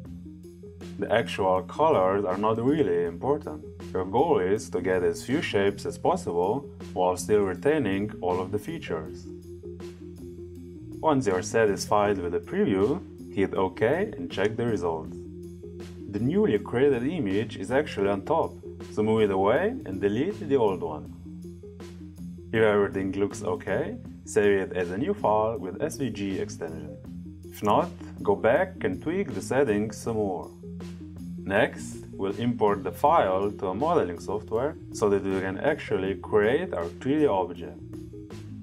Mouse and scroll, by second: 1.0 click, 12.0 click, 14.5 click, 20.3 click, 21.8 click, 24.8-38.6 drag.